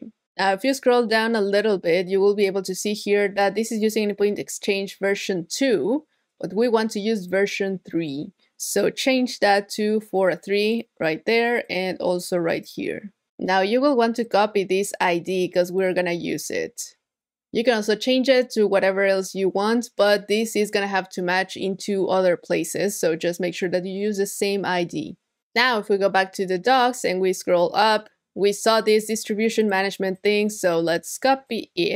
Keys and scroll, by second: 16.7 super+c.